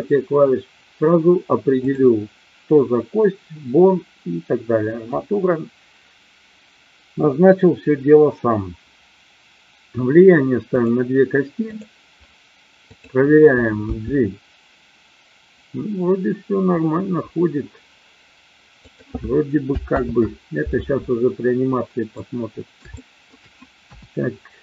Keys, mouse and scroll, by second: 10.7 click, 11.7 click, 12.7-13.8 drag, 13.8 g, 18.7 click, 20.0 ctrl+z, 22.1-23.3 middle drag, 23.7 KP_1.